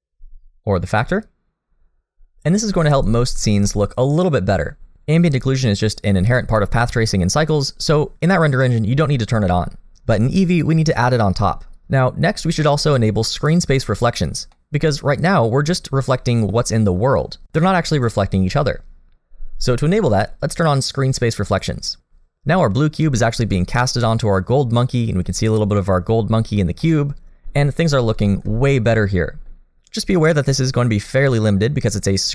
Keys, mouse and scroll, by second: 0.6 click, 3.2-3.5 scroll down 1, 3.7 shift+middle click, 5.2 middle click, 5.9 shift+middle click, 14.5 middle click, 21.5 click, 24.8 middle click, 25.8 middle click, 26.5-26.9 scroll down 2, 26.8 middle click, 27.5-28.1 scroll down 2, 28.2 shift+middle click, 28.6-29.7 scroll up 2, 28.9 middle click, 31.8 middle click.